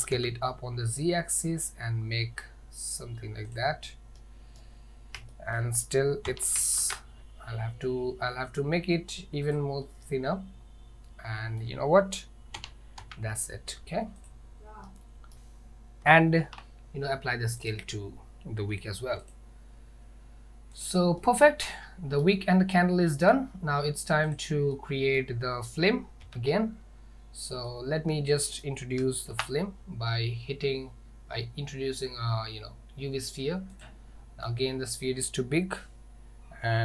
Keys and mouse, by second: 4.2-4.6 middle drag, 5.4 shift+middle drag, 6.3 s, 9.9-11.7 middle drag, 12.6 s, 14.9-15.3 middle drag, 16.4 ctrl+a, 21.3-22.3 middle drag, 23.1 middle drag, 24.4 click, 24.9-25.2 middle drag, 26.3 KP_1, 27.7-28.6 middle drag, 28.7 middle click, 29.4 shift+a.